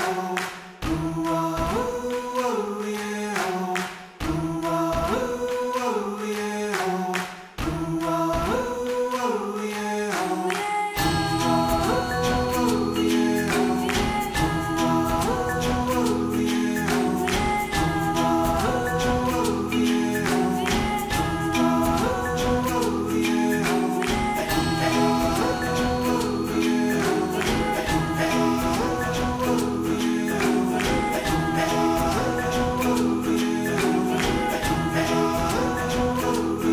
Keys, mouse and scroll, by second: 0.0 click, 0.4 Tab, 1.3 Tab, 1.6 3, 2.2 click, 2.7-5.7 typing, 3.9 click, 5.0 click, 6.9 click, 7.4 l, 7.8 g, 10.3 click, 10.7 l, 10.9 g, 12.6 Tab, 13.1 ctrl+s, 13.2 scroll down 3, 13.3-13.7 middle drag, 13.7 scroll up 2, 13.8-14.1 middle drag, 14.3 middle click, 14.5 Tab, 15.0 KP_3, 15.5 1, 15.7 alt+z, 15.9 click, 16.3 g, 17.7 middle drag, 17.9 alt+z, 18.0-18.4 middle drag, 18.4 g, 19.2 scroll up 1, 19.4 g, 21.2 KP_1, 21.4 scroll down 3, 21.6 ctrl+s, 23.8 shift+a, 27.9 s, 29.0 s, 30.5 click, 31.0 ctrl+a, 31.7 click, 32.1 scroll up 1, 32.4-33.0 shift+middle drag, 33.0 Tab, 33.3 ctrl+r, 33.9 1, 34.0 alt+z, 34.2 click, 34.5 s, 35.1 ., 35.5 s, 36.4 alt+z, 36.5 shift+middle click.